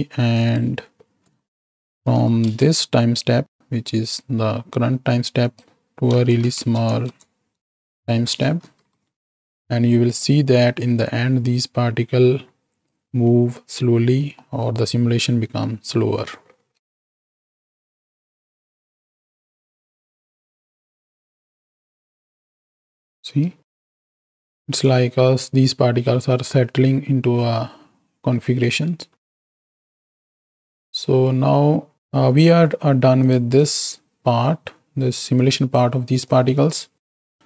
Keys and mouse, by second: 0.4-2.5 drag, 5.5-7.9 drag, 7.0 KP_0, 8.6 shift+Right, 8.8 shift+Left, 10.2-10.7 drag, 11.0-13.0 drag, 14.4 middle click, 16.8 space, 21.8 KP_1, 23.6 space, 24.8-29.9 drag, 31.2 middle click, 31.9 ctrl+space, 33.2 drag, 33.5-35.7 drag, 36.4-37.4 drag.